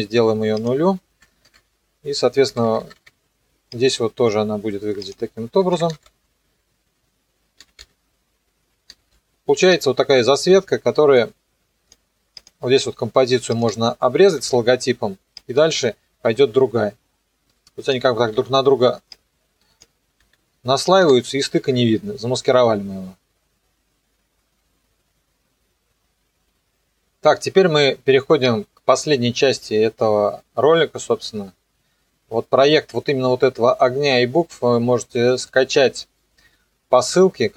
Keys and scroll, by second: 1.3 KP_0, 1.4 KP_Enter, 2.4 =, 5.6 KP_0, 9.0 alt+[, 14.4 alt+], 18.1 -, 20.2 b, 21.0 n, 21.6 KP_0.